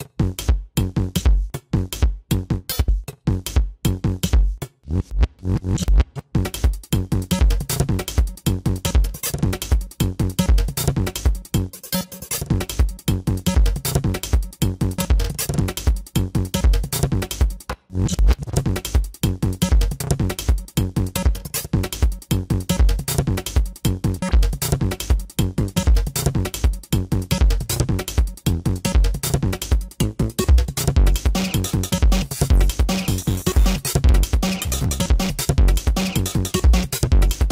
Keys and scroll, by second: 0.8 ctrl+-, 2.6 ctrl+-, 2.8 space, 10.3 ctrl+alt+z, 10.6 ctrl+alt+z, 12.6 space, 13.1 ctrl+alt+z.